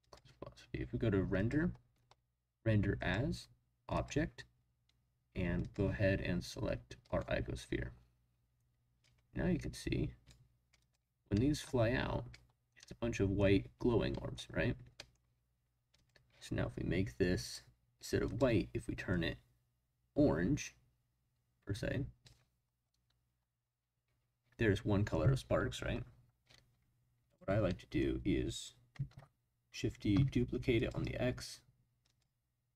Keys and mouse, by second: 0.0 click, 1.3 click, 2.9-4.0 drag, 5.6 click, 9.0-10.3 drag, 10.8 click, 11.3-11.6 middle drag, 12.8-13.4 middle drag, 14.1 middle drag, 14.9 middle click, 15.9 click, 18.3 click, 27.2 click, 27.7 drag, 29.1 shift+d, 30.1 x, 30.7 click, 32.0 click.